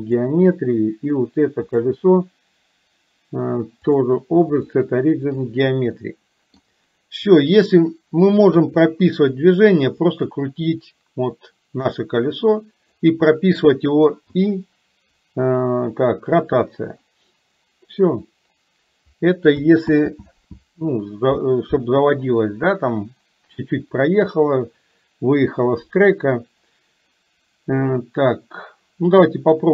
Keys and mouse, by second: 3.9-5.5 drag, 6.0 middle click, 7.5 click, 8.5 KP_3, 10.3 click, 10.7-13.0 drag, 19.9 ctrl+z.